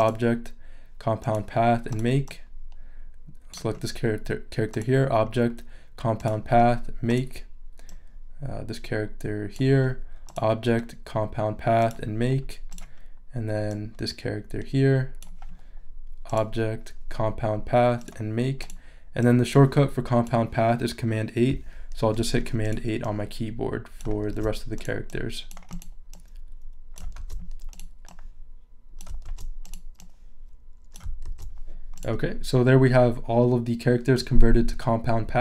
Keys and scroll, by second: 22.0 super+8, 24.3 super+8, 27.2 super+8, 29.2 super+8, 31.2 super+8.